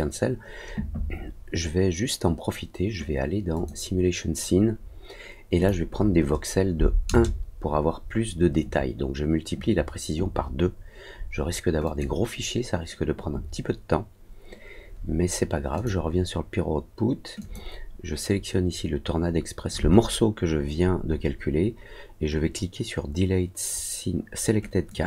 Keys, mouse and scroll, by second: 3.5 click, 5.5 click, 11.8 click, 15.7 click, 17.3 click, 24.8 click.